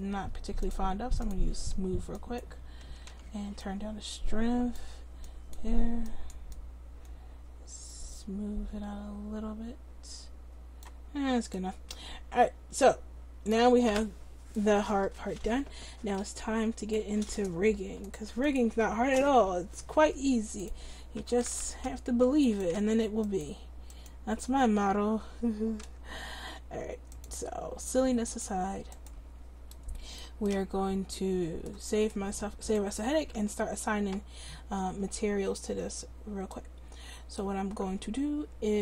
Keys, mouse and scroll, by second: 3.1 ctrl+z, 11.2 middle click, 14.0 middle click, 18.6-29.9 drag, 32.2-34.8 drag, 33.4 Tab.